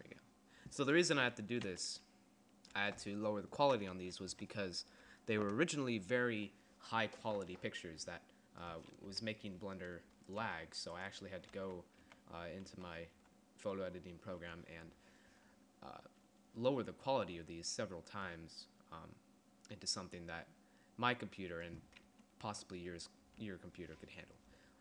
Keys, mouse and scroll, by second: 1.2 KP_3, 2.0 KP_5, 4.0 KP_1, 4.6 KP_5, 9.2 KP_1, 10.6 g, 11.6 z, 12.1 z, 12.8 z, 13.3 z, 22.6 KP_3, 23.6 KP_3.